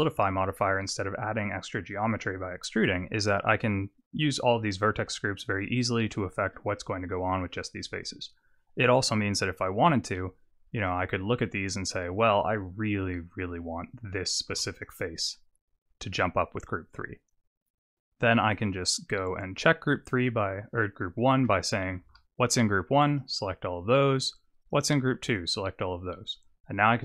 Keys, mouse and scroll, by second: 0.2 shift+middle click, 4.6 Tab, 10.1 click, 10.7 click, 14.5 3, 14.6 click, 18.6 click, 20.2 click, 22.0 alt+a, 23.1 click, 24.6 click, 25.4 click.